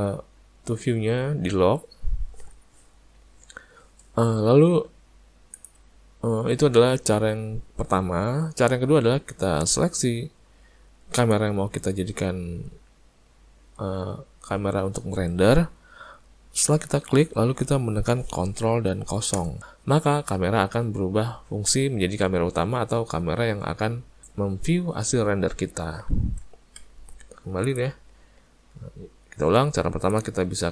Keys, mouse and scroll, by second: 6.8-7.3 scroll down 2, 7.9-9.3 scroll down 5, 11.2 click, 19.4 ctrl+KP_0, 28.6-29.4 scroll down 4, 30.1 click, 30.1 scroll down 2.